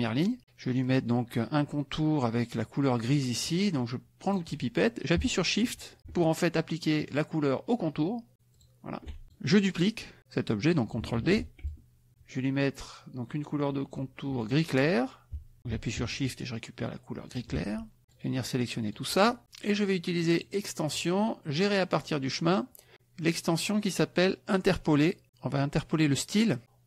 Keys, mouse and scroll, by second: 4.2 click, 8.6 shift+click, 9.2 click, 11.2 ctrl+d, 11.7 ctrl+click, 14.4 click, 17.3 shift+click, 18.1-19.1 drag, 20.4 click, 24.8 click, 26.6 click.